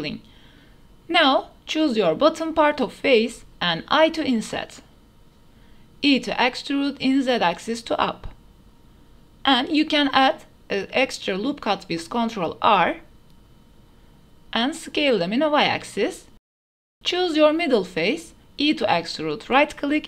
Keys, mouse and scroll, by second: 0.0 shift+middle click, 0.3 middle click, 0.4 click, 0.7 Tab, 1.8 3, 2.2 click, 2.8 shift+click, 4.6 i, 7.6 e, 8.7 shift+click, 9.4 ctrl+r, 12.5-13.2 drag, 13.8 s, 14.3 y, 16.6 click, 17.3 click, 17.8 3, 18.4 click, 19.2 e.